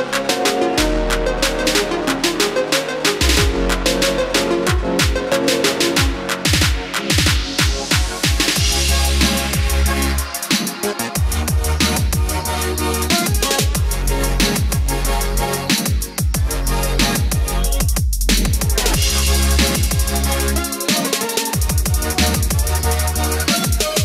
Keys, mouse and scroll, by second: 0.2 click, 3.4 KP_5, 5.5 click, 6.7-12.6 middle drag, 13.1 click, 15.4-16.0 scroll down 1, 16.0-16.6 scroll up 1, 19.5 click, 21.0 middle click, 22.0-22.4 scroll up 1, 23.0 scroll down 1, 23.4 scroll up 1.